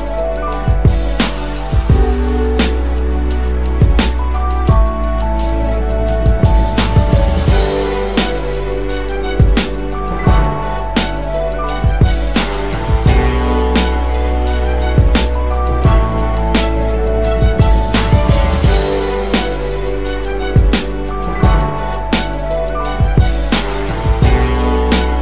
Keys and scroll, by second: 0.8 Return, 1.0-2.6 typing, 11.6-12.2 typing.